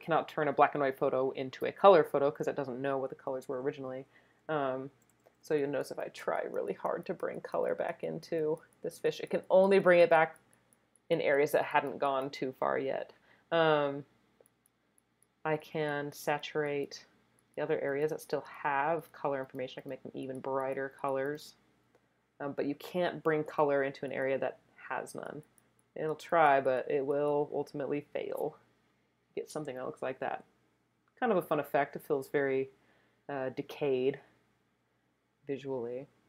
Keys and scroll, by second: 4.9 [, 5.1 [, 5.2 [, 5.4 [.